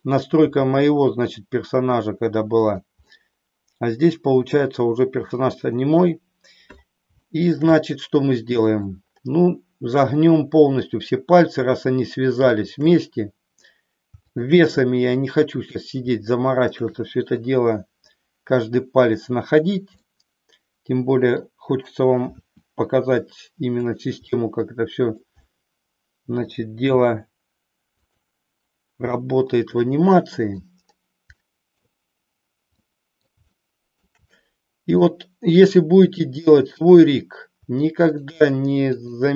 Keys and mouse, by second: 0.3 g, 3.2-5.3 middle drag, 7.2 shift+middle click, 7.9-8.9 middle drag, 12.6-13.7 shift+drag, 16.6-17.8 shift+drag, 20.0-21.4 middle drag, 22.3 r, 23.9 click, 24.4 middle click, 25.7 middle click, 27.0 r, 29.0-30.7 middle drag, 31.3 middle click, 32.8 middle click, 33.6 shift+middle click, 34.4 middle click, 36.0-37.3 drag, 37.9-39.3 shift+drag.